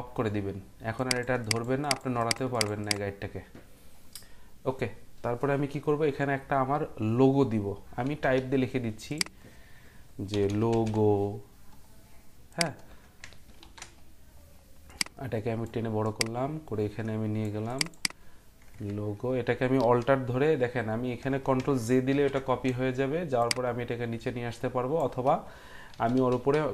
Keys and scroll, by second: 8.3 t, 10.1-11.4 typing, 13.6 ctrl+t, 14.8-15.5 typing, 22.1 ctrl+j, 25.9 Down, 26.1 Down, 26.5 Down.